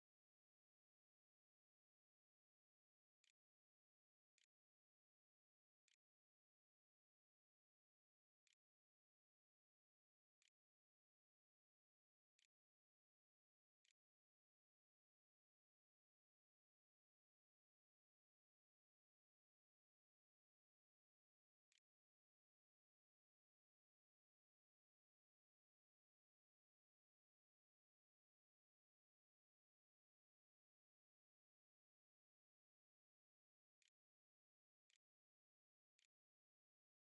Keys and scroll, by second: 1.3-8.8 typing, 10.2 space, 12.2 Tab, 12.6-13.9 typing, 16.2-17.1 typing, 19.8-22.6 typing, 33.1 =, 33.2 BackSpace, 33.6 Home, 34.0 BackSpace, 34.2 \, 34.4 Return, 35.4 Up.